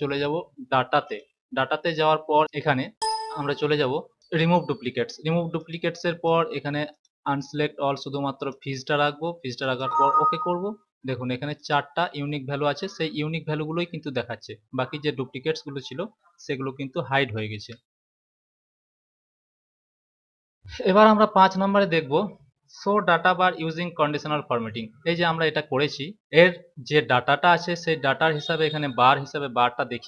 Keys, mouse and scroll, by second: 0.9 click, 2.9 click, 4.2 click, 5.5 click, 6.9 click, 8.2 click, 9.6 click, 11.5 click, 17.4 ctrl+z, 20.5 click.